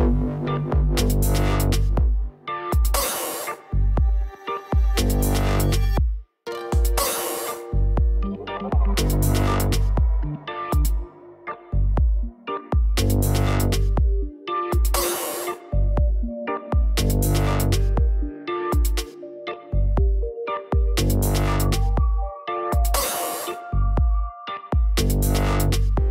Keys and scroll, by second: 10.7 ctrl+0, 16.5-17.9 typing.